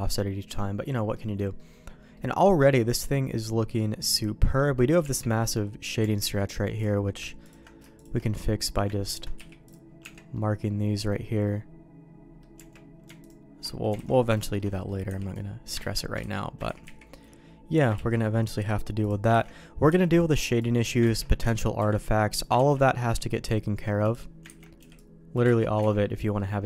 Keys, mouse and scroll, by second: 0.4 middle click, 1.1 middle click, 1.5 middle click, 2.1 middle click, 2.6-4.1 middle drag, 4.6 middle click, 5.0 Tab, 6.0 Tab, 6.7 click, 7.9 shift+click, 8.2 middle click, 9.0 ctrl+click, 9.3 q, 10.0 Tab, 10.3 middle click, 11.4 middle click, 12.5 Tab, 13.7 middle click, 13.9 alt+a, 14.4 shift+middle click, 14.7 middle click, 15.0 b, 15.8 ctrl+q, 16.2 ctrl+x, 16.6 ctrl+z, 16.8 ctrl+z, 17.9 ctrl+q, 19.3 ctrl+x, 19.9 b, 21.2 ctrl+q, 21.4 ctrl+x, 21.8 b, 22.5 ctrl+q, 24.0 click, 24.4 ctrl+x, 24.8 b, 25.4 ctrl+q, 25.9 ctrl+x, 26.0 middle click.